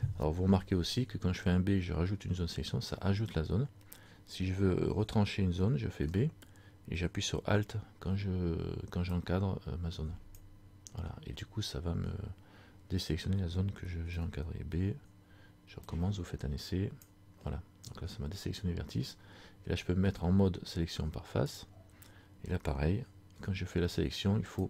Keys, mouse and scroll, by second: 21.7 click, 23.4 b.